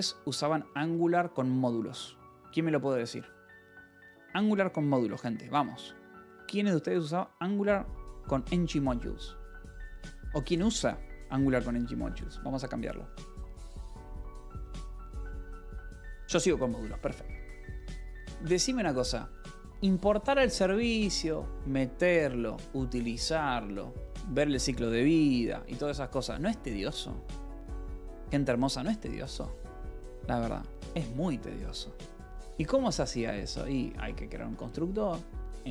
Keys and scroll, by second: 33.7-35.7 typing.